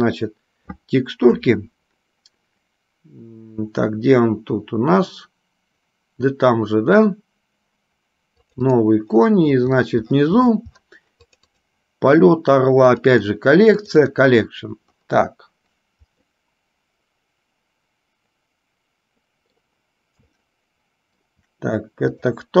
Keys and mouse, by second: 16.4-19.8 middle drag, 20.6-21.4 shift+middle drag.